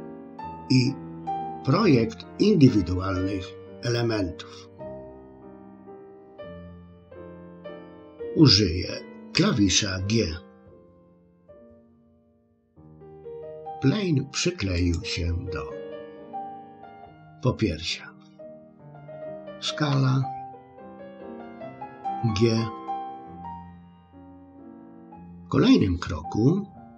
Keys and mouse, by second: 6.9 middle click, 10.8 g, 19.7 s, 22.6 g.